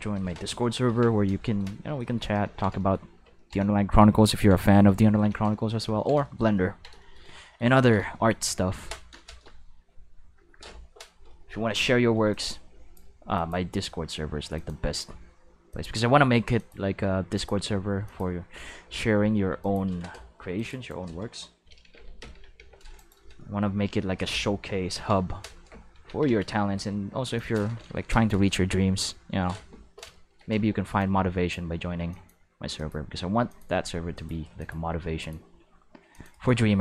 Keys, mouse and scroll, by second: 0.8 ctrl+v, 2.0 shift+middle drag, 2.4 ctrl+s, 2.8 shift+middle click, 4.1-4.5 ctrl+middle drag, 4.9 ctrl+middle drag, 6.0 ctrl+middle click, 6.2 shift+middle drag, 11.7 c, 12.3-12.9 drag, 13.3 click, 14.5 click, 15.7 click, 16.5 click, 17.3 click, 18.0 click, 19.6 click, 20.5 click, 20.8 right click, 22.1 ctrl+l, 22.5 x, 22.9 click, 24.9 ctrl+v, 26.0 ctrl+s, 27.3 click, 30.5 c, 30.9-31.5 drag, 32.1 click, 32.7 click, 33.4 click, 34.1 click, 34.5 click, 35.2 click, 36.1 click, 36.3 right click, 36.4-36.8 shift+middle drag.